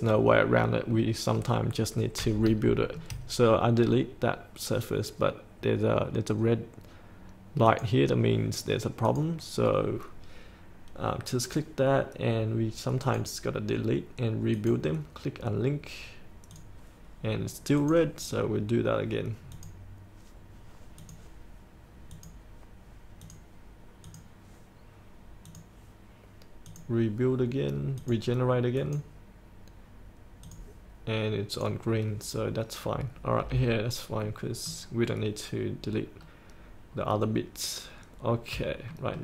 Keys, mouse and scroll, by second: 0.3-0.9 scroll up 1, 0.9-2.1 middle drag, 2.7 shift+middle click, 7.7-31.6 drag, 33.8-34.4 scroll up 1, 34.4-35.7 middle drag, 36.3-37.1 scroll down 1, 38.4-38.7 scroll up 1, 39.0 shift+middle click.